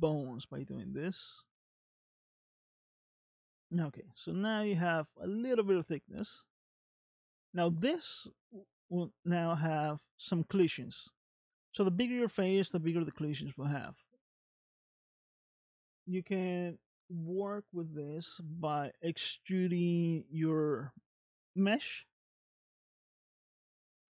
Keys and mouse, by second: 2.6-5.8 middle drag, 8.7-9.9 middle drag, 17.7 click, 19.1 middle click, 20.8 middle click, 23.1 shift+middle click.